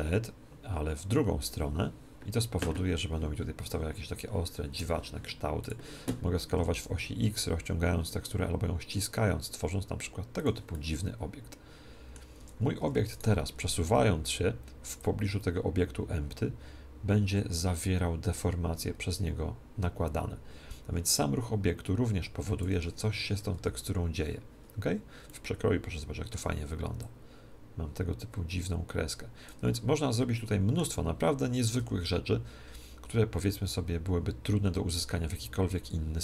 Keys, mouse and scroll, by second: 5.6-7.5 drag, 6.5 s, 10.3-12.3 drag, 10.6-12.3 middle drag, 12.3 Tab, 12.8 Tab, 13.1-14.9 right drag, 14.9-16.9 drag, 22.7 Escape, 23.5 z, 25.3-26.9 middle drag, 26.9-28.9 drag, 29.7-31.6 middle drag, 31.7 g.